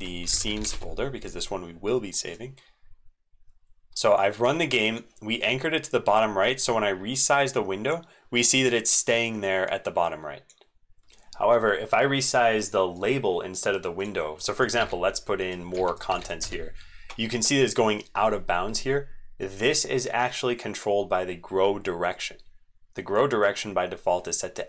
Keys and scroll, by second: 11.2 super+2, 14.8 ctrl+v, 15.8 ctrl+v, 16.1 ctrl+v, 16.4 ctrl+v.